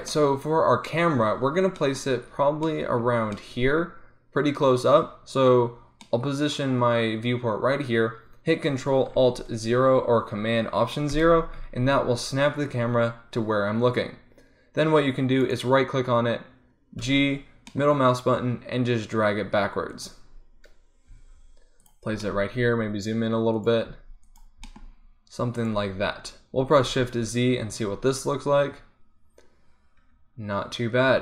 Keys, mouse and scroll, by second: 11.2 ctrl+alt+KP_0, 15.9-17.1 right drag, 17.1 g, 17.8-19.1 middle drag, 19.2-20.3 middle drag, 20.4-22.1 middle drag, 22.2 middle click, 22.2 g, 24.0 g, 24.8 g, 27.3 shift+z.